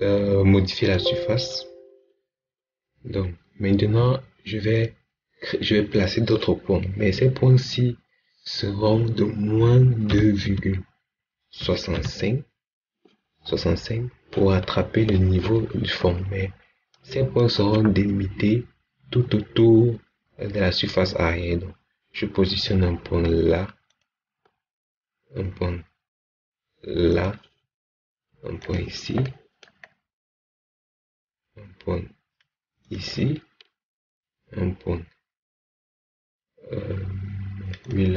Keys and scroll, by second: 10.0 2, 10.3 ., 11.5 6, 11.8 5.